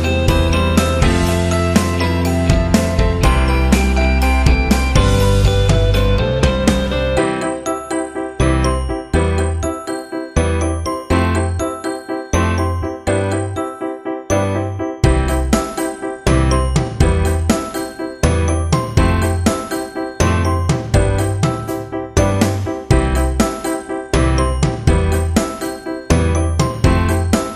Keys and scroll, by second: 0.5 ctrl+t, 4.0 Return, 5.4 ctrl+j, 8.6 Delete, 10.2 ctrl+t, 14.7 Return, 16.4 v, 18.8-20.6 typing, 22.3 v, 26.7 ctrl+t.